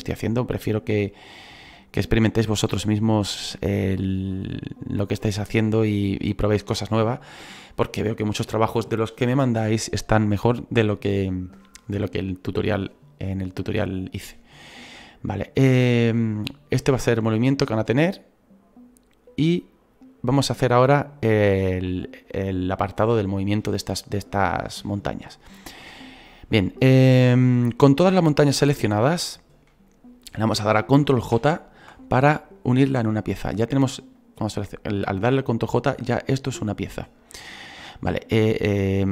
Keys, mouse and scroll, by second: 31.4 ctrl+j, 33.3-39.1 right drag.